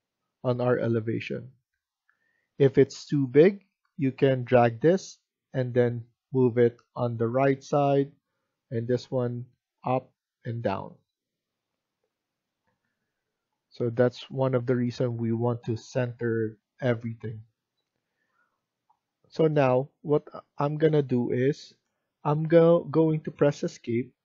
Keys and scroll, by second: 21.9 Escape, 22.9 Escape.